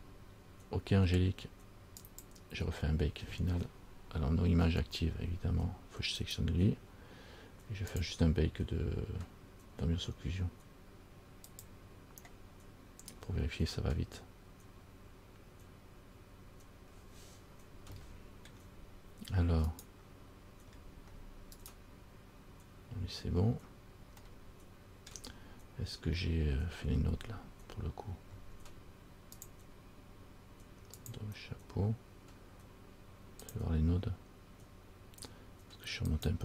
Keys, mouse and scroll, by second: 0.3 scroll down 2, 2.2 click, 6.4 right click, 8.1 click, 16.9-18.1 scroll down 2, 18.2 shift+middle click, 19.9 right click, 20.9-21.5 scroll up 6, 21.8 right click, 23.4-23.7 scroll down 3, 24.4 shift+middle click, 29.6 click, 31.2 click, 33.6 click.